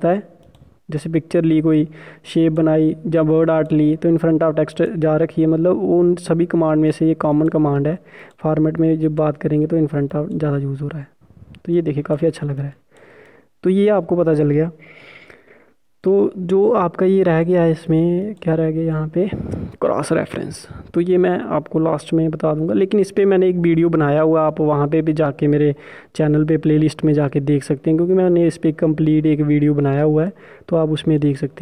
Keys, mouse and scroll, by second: 1.2 click, 8.1 click, 15.8 Delete, 16.6 click, 16.9 Delete, 18.1 click.